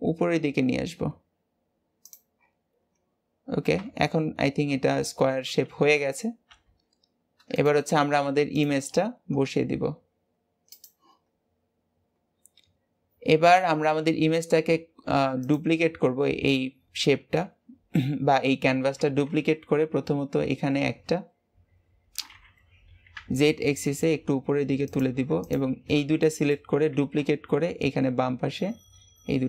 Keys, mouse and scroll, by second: 2.2-2.9 scroll down 7, 2.9-3.4 scroll down 4, 3.7 Tab, 4.0 scroll down 2, 6.4 g, 8.4 click, 10.3 click, 11.2 scroll down 2, 12.1 scroll up 1, 13.6-14.6 scroll up 1, 14.6 g, 18.9 shift+d, 25.3 shift+click, 25.7-26.1 scroll down 3, 26.1 shift+middle click, 26.8 shift+d.